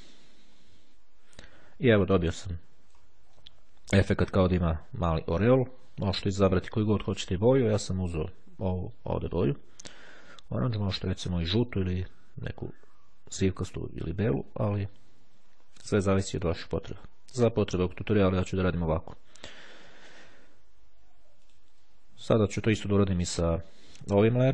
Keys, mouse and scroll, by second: 0.6-1.2 ctrl+scroll up 2, 3.1 middle click, 12.4-13.4 ctrl+scroll down 2, 13.6-14.2 ctrl+scroll down 2, 16.2-17.1 drag, 17.7 click, 21.5 click.